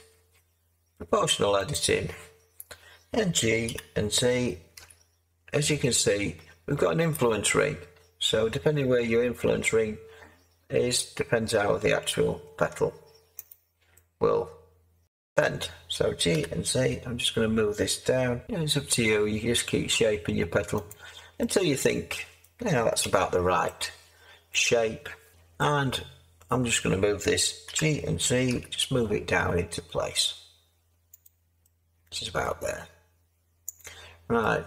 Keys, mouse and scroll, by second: 3.6 g, 4.7 z, 16.3 g, 18.4 z, 23.0 Tab, 25.3 7, 27.6 g, 28.5 z.